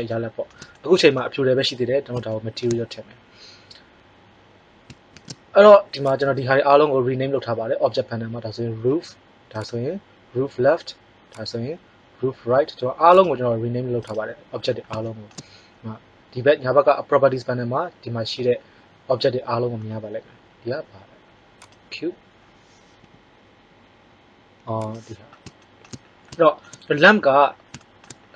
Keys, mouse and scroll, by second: 5.1 shift+z, 6.0 drag, 14.1-16.1 drag, 21.6-23.6 drag, 22.9 g.